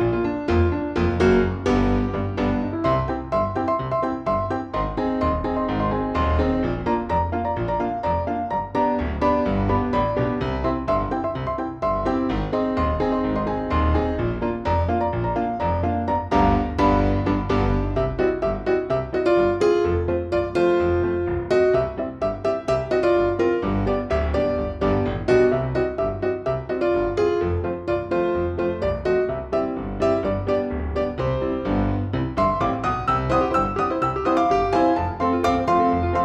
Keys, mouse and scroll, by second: 1.6 shift+click, 3.2 ctrl+shift+g, 4.1 click, 4.6 shift+click, 5.0 shift+click, 5.7-6.8 drag, 7.2 ctrl+g, 8.2 click, 10.3 Down, 10.5 Down, 10.6 Down, 12.0 click, 12.8 ctrl+shift+g, 13.6 click, 15.2 click, 15.6 ctrl+shift+g, 16.5 click, 16.9 ctrl+shift+g, 17.5 click, 18.0 ctrl+shift+g, 19.0 click, 24.0 F4, 24.6 click, 26.6 F4, 27.2 click, 29.2 F4, 29.6 click, 32.4 F4, 32.6 click, 34.8 ctrl+g, 35.3 click.